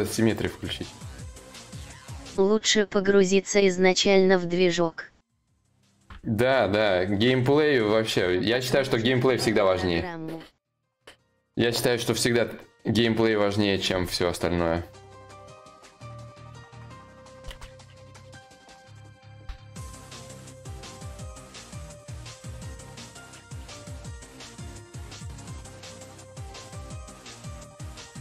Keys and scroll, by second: 3.6 ctrl+z.